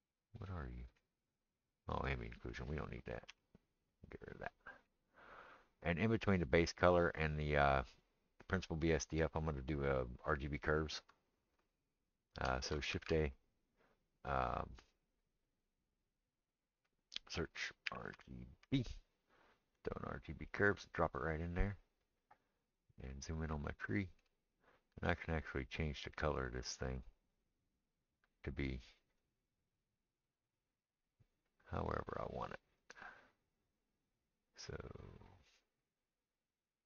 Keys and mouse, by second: 2.2-6.7 middle drag, 3.3 x, 6.7-20.7 drag, 20.7-27.1 middle drag, 27.1-36.8 drag.